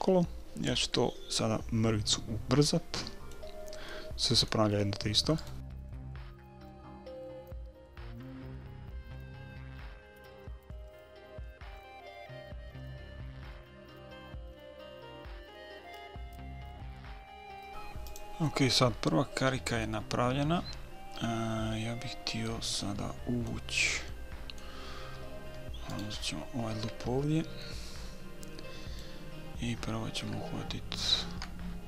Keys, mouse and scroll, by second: 2.1-5.4 middle drag, 5.4 right click, 5.5 middle click, 6.0 middle click, 6.3 right click, 7.4 f, 7.7-9.5 right drag, 8.3 f, 9.2 f, 9.5 middle click, 9.7 right click, 10.2 middle click, 10.4 right click, 11.0 f, 11.4-13.0 right drag, 11.8 f, 12.8 f, 13.0 middle click, 13.4-15.9 right drag, 13.9 f, 14.6 f, 15.6 f, 15.9 middle click, 15.9 KP_3, 16.3 KP_1, 16.5 middle click, 16.6 a, 19.1-19.9 scroll down 1, 19.9-22.1 middle drag, 23.2-25.9 middle drag, 26.2-28.0 right drag, 28.0-30.0 middle drag.